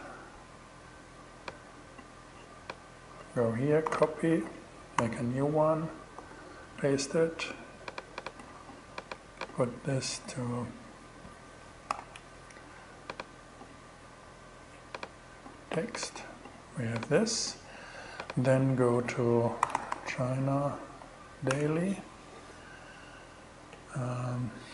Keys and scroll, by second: 3.3 super+c, 5.6 super+v, 11.3 super+z, 12.2 ctrl+super+z, 18.8-20.4 typing, 21.5 Return.